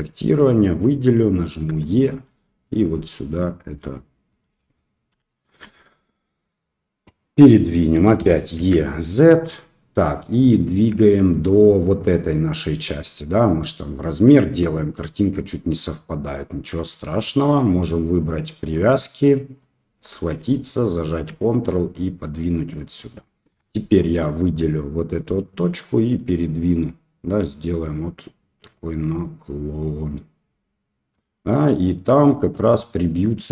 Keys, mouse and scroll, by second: 1.6 e, 5.2 shift+middle click, 6.4 click, 8.1 e, 17.3-18.5 drag, 19.5-21.1 drag, 23.5 1, 24.0 click, 25.5-31.1 drag.